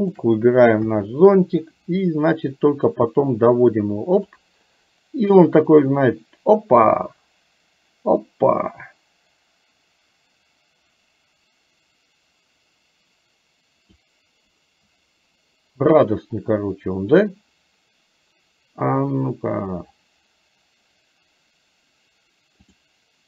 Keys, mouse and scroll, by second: 0.0 shift+click, 0.9 KP_3, 3.1-4.4 drag, 6.3-14.0 drag.